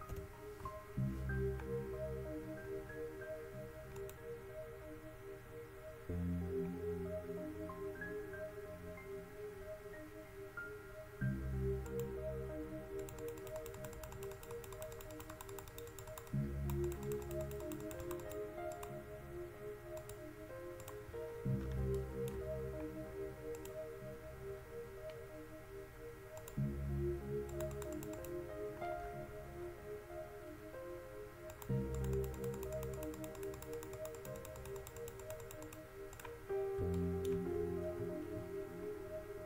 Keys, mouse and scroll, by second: 0.3 ctrl+KP_1, 4.2-5.4 drag, 14.8 middle click, 21.5-22.3 middle drag, 22.8-24.4 middle drag, 29.2 middle click, 34.6-35.9 drag, 37.1 middle click, 38.1-38.4 middle drag.